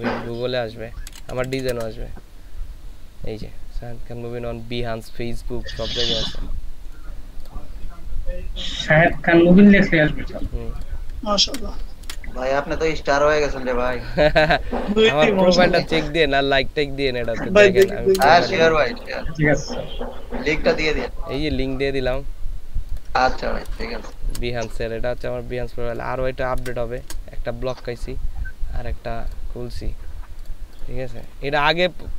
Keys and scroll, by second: 0.0-1.7 typing, 11.5 ctrl+a, 12.1 ctrl+c, 17.8 ctrl+v, 18.2 ctrl+Return, 23.7 ctrl+v, 24.3 ctrl+Return, 26.6 ctrl+v, 27.1 ctrl+Return.